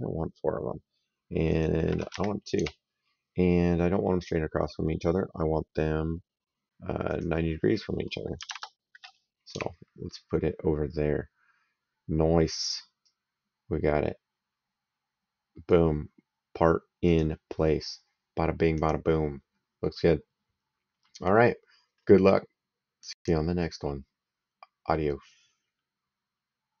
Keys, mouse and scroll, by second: 1.4 click, 2.0 2, 2.4 Tab, 6.9 click, 8.2 KP_9, 8.3 KP_0, 9.4 Tab, 12.9 right click, 16.9 click, 18.7 click, 19.9 right click, 22.9 click, 26.7 click.